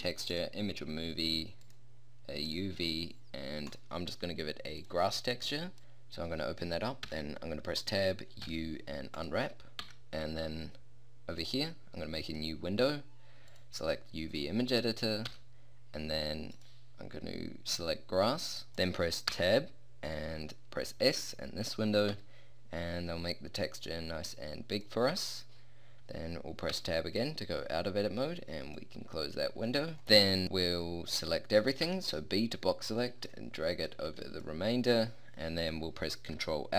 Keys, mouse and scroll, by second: 1.3-1.7 drag, 7.1 Tab, 8.5 u, 9.9 Tab, 11.4 click, 11.9 click, 12.3 click, 19.3 Tab, 22.1 s, 26.7 Tab, 29.2-30.1 middle drag, 31.9 b, 34.1 b.